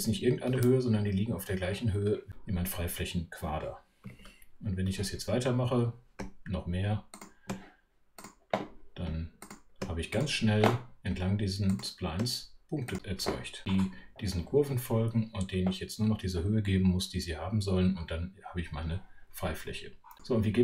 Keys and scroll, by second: 0.5 super+3.